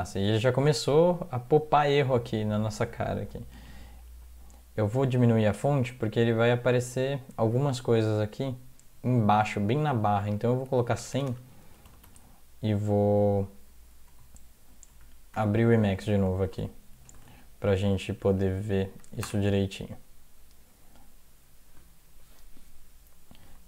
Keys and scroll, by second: 3.6 ctrl+-, 4.2 ctrl+0, 4.9 ctrl+-, 5.6 ctrl+-, 6.3 ctrl+-, 10.3 Right, 10.7 Right, 11.0-12.5 typing, 14.1 ctrl+x, 14.9 ctrl+s, 15.4 ctrl+s, 16.4 alt+F4, 17.3 alt+Tab, 18.1 alt+Tab, 18.3 alt+Tab, 18.7-19.4 typing.